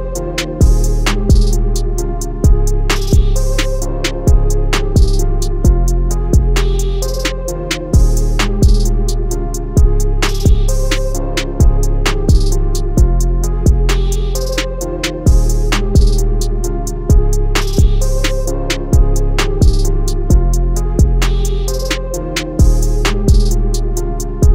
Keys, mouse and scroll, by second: 0.3 ctrl+z, 1.0 click, 23.0 scroll up 1, 23.6 scroll up 1, 24.3 click.